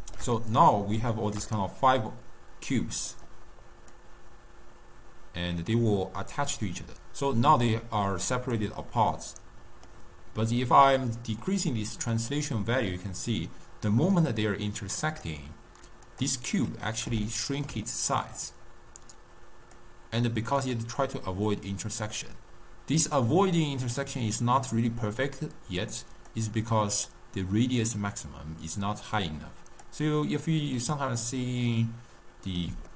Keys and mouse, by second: 4.0-7.1 drag, 9.1-10.6 middle drag, 10.6-13.7 drag, 16.2 click, 16.8-19.9 middle drag, 19.9-22.9 drag, 27.2-30.2 drag, 30.9-32.9 middle drag.